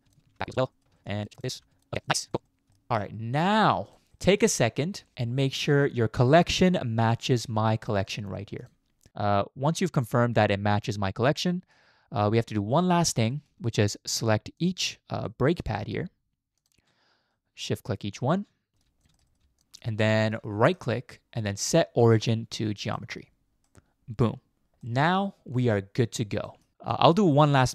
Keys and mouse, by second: 0.3 ctrl+p, 0.7 middle click, 1.0 shift+middle click, 1.7 ctrl+p, 2.1 middle click, 2.5 middle click, 2.9 ctrl+p, 3.0-3.7 middle drag, 4.1 middle click, 6.2 click, 6.7-7.9 drag, 8.6 click, 11.5 middle click, 12.6 middle click, 13.3 shift+middle click, 13.7 middle click, 15.3 middle drag, 15.8 shift+middle click, 16.5 shift+click, 17.3-17.9 middle drag, 18.2 shift+middle click, 18.7 middle click, 19.2 shift+middle click, 19.6 shift+middle click, 20.2 shift+middle click, 20.7-23.0 right drag, 23.7-24.7 middle drag, 24.8 shift+middle click, 25.1-26.2 middle drag, 26.5 shift+middle click, 26.8 shift+middle click.